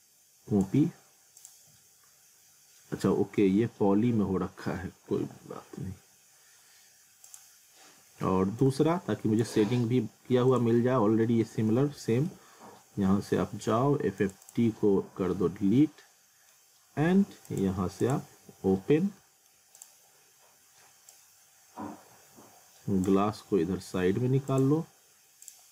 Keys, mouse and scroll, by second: 3.0 alt+middle click, 7.3 click, 7.7 scroll down 1, 8.6 click, 10.7 z, 11.3 alt+middle click, 11.7 scroll down 1, 12.0 alt+middle click, 14.2 click, 15.1 scroll down 1, 15.3 middle click, 17.5 click, 19.1 scroll up 1, 19.2 alt+middle click, 19.8 click, 20.1 scroll down 1, 21.1 click.